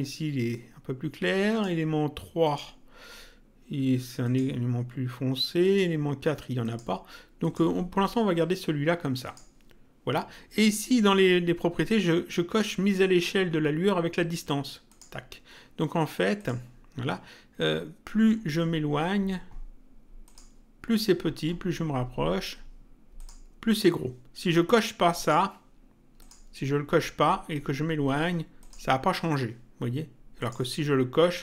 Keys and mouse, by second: 1.5 click, 4.3 click, 5.6 click, 9.3 click, 14.9 click, 16.4 click, 20.2 click, 23.2 click, 25.2 click, 28.6 click, 30.4 click.